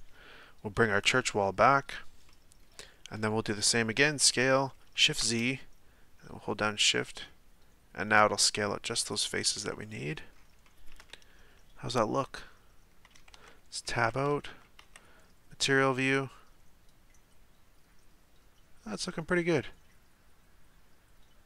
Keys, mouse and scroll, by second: 0.9-2.3 drag, 2.3 middle click, 2.8-4.2 scroll down 2, 4.2 s, 9.9-13.3 middle drag, 13.3 Tab, 13.8-14.3 middle drag, 14.3 a, 14.5 a, 15.1 z, 15.6-18.6 middle drag.